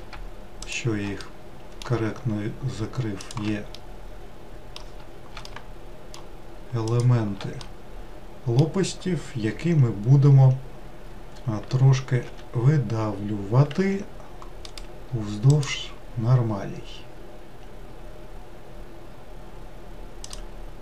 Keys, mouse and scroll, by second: 0.7 shift+click, 1.2-3.3 middle drag, 3.3 shift+click, 3.8-6.9 middle drag, 6.9 shift+click, 7.6-10.8 middle drag, 12.3 e, 15.7-20.8 right drag.